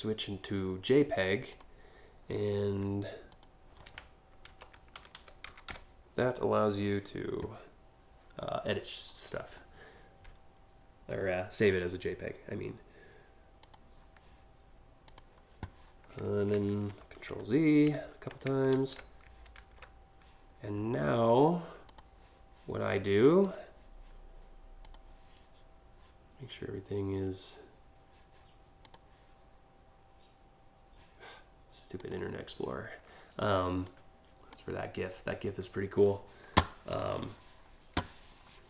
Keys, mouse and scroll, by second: 1.1 click, 2.1 click, 2.9 click, 4.1 Delete, 4.3-5.8 typing, 13.2 click, 14.7 click, 21.5 click, 23.0 click, 24.4 click, 28.4 click, 31.6 click, 33.4 click.